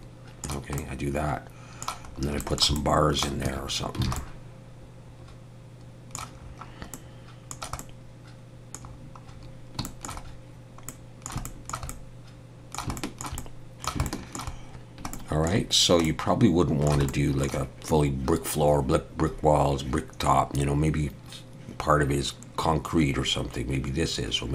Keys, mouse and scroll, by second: 0.8 middle click, 2.1 scroll up 2, 2.4 shift+middle click, 2.4 shift+middle click, 2.8 middle click, 3.5 Tab, 3.7-4.0 scroll down 2, 4.1 alt+a, 4.2 middle click, 6.4-6.9 scroll up 2, 6.9 middle click, 7.9 middle click, 8.9-9.5 scroll down 4, 9.9 shift+middle click, 9.9 shift+middle click, 10.3 scroll down 1, 10.9 middle click, 11.5 shift+middle click, 11.9 middle click, 13.0 shift+middle click, 13.4 middle click, 14.1 shift+middle click, 15.6 shift+middle click, 15.7 scroll down 1, 16.1 middle click, 17.1 shift+middle click.